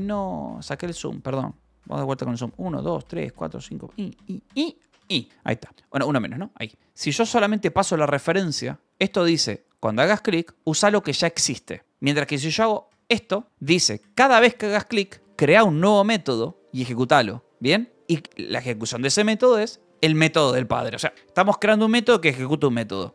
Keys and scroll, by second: 3.0 ctrl+=, 5.5 Escape, 6.4-7.7 typing, 8.9 Escape, 9.0 h, 10.5 l, 11.0 v, 11.6 e, 11.9 Escape, 12.8-15.2 typing, 15.0 Escape, 18.3-21.1 typing.